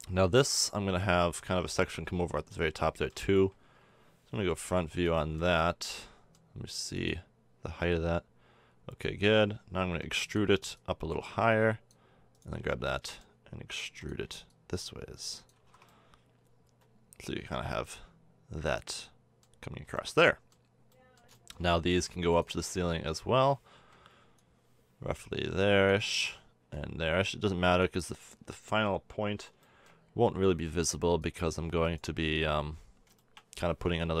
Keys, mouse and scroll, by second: 0.7 middle click, 0.8 middle click, 3.3 KP_1, 4.6 z, 7.7 z, 10.1 e, 12.6 middle click, 13.8 e, 15.5 a, 15.6 Tab, 16.2-17.2 middle drag, 19.9-21.9 middle drag, 21.9 Tab, 23.7 KP_1, 26.9-28.1 middle drag, 28.1 click, 28.2 middle click, 29.8-34.2 drag, 32.3 KP_1.